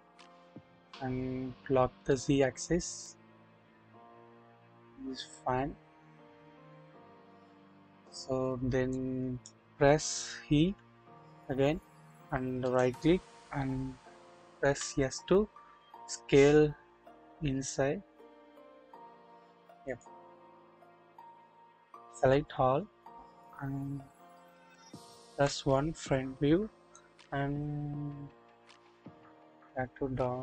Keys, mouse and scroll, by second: 2.1 typing, 8.9 click, 10.6 typing, 12.6 right click, 14.6 typing, 21.2 scroll down 1, 22.1 a, 22.9-25.2 scroll down 1, 25.8 KP_1, 26.8 scroll up 1, 27.0-30.4 drag.